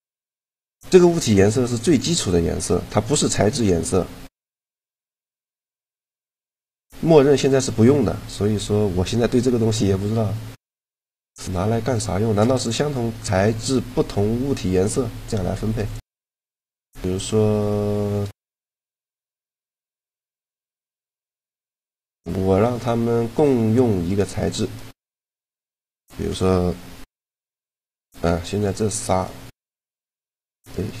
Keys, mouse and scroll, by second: 0.7-3.2 drag, 4.4-8.4 drag, 8.6-10.7 middle drag, 10.7-13.2 right drag, 13.2-15.6 middle drag, 15.6-17.6 drag, 16.3-18.4 middle drag, 16.3-17.3 right drag, 19.2-22.7 right drag, 19.6-21.2 middle drag, 22.7-24.8 middle drag, 24.8-27.1 right drag, 27.1 ctrl+l, 28.4-31.0 right drag.